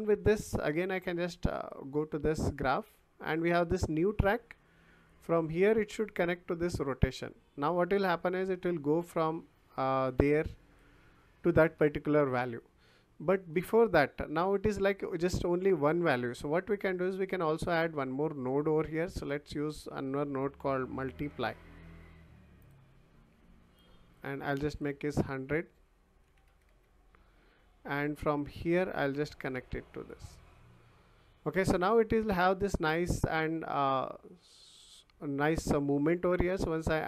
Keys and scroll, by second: 20.4-21.8 typing, 26.2 1.